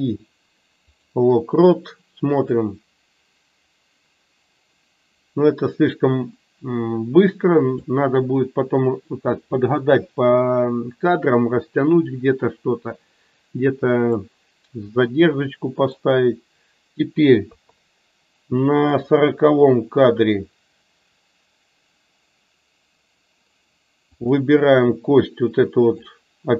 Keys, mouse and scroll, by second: 2.4-7.8 drag, 18.9 click, 25.9-26.5 drag.